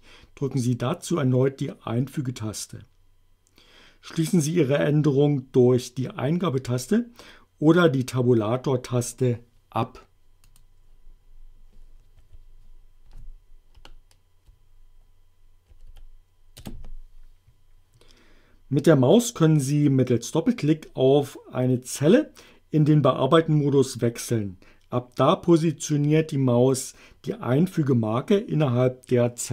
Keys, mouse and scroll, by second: 10.5 click, 12.2 F2, 13.6 Left, 15.7 Delete, 16.6 Return.